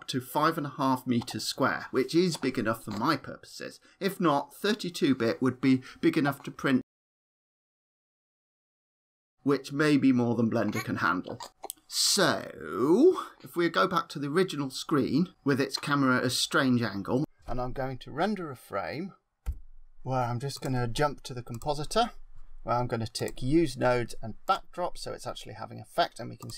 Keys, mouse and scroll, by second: 13.7 click, 20.5 click, 23.1 click, 24.3 click, 26.3 click.